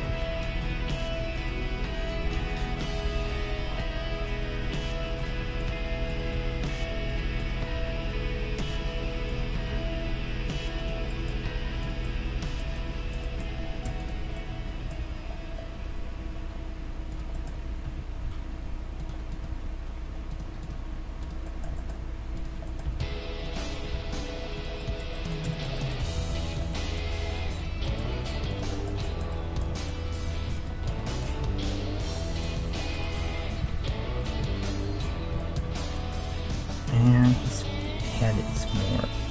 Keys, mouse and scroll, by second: 0.1 ctrl+Tab, 0.1 middle click, 0.9-3.0 right drag, 2.2 o, 3.0 middle click, 3.1 g, 5.6-11.0 right drag, 6.3 g, 7.8 g, 9.1 middle click, 9.7 g, 11.0 middle click, 11.8-13.3 drag, 11.8-13.5 right drag, 13.3-16.2 middle drag, 14.0-15.7 right drag, 15.0 g, 16.3 middle click, 17.3-19.3 middle drag, 17.8 g, 19.3-25.3 right drag, 19.5 g, 21.4-24.5 middle drag, 22.8 g, 23.9 g, 24.8-26.5 middle drag, 26.1 g, 27.6-29.5 right drag, 28.1 g, 29.5-39.3 middle drag, 30.3-32.5 right drag, 31.4 g, 33.6 KP_1, 38.9-39.3 right drag.